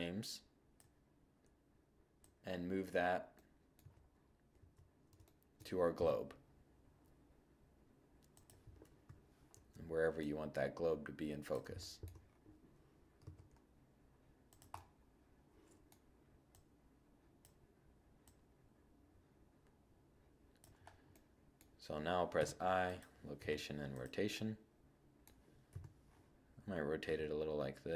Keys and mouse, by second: 2.6 click, 2.8 2, 3.1 middle click, 3.6 KP_1, 5.0 g, 7.9-11.0 drag, 7.9 7, 12.2 g, 13.8 middle click, 13.9 drag, 21.3 i, 22.4 i, 24.7 7, 26.2 r, 27.2 g.